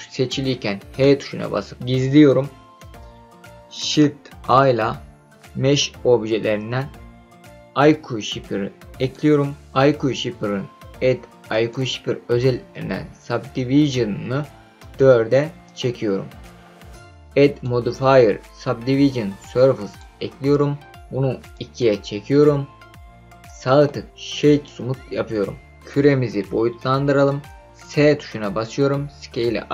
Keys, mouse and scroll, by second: 1.0 h, 4.4 shift+a, 11.5 click, 14.8 click, 15.6 click, 16.5-17.2 scroll up 2, 17.4-20.6 drag, 21.5 click, 23.6 click, 23.6 right click, 27.8 s.